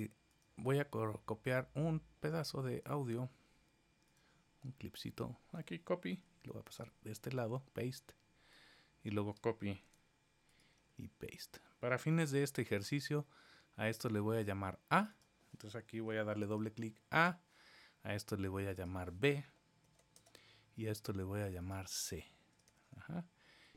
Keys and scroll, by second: 6.1 super+c, 7.0 super+v, 9.8 super+c, 10.8 super+v.